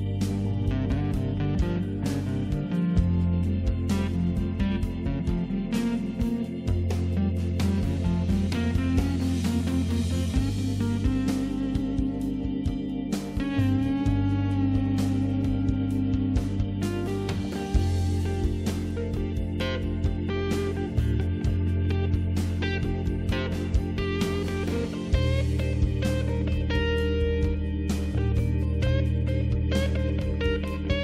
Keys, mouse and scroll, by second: 4.0 click, 6.8 click, 8.9 click, 10.0 click, 12.9 click, 16.8 click, 21.4 click, 23.5 click, 24.8 click, 25.7 click, 26.5 click, 27.4 click, 27.5 click, 27.8 click, 28.2 click, 28.6 click, 29.1 double click, 29.1 click, 29.4 click, 30.2 click, 30.9 click.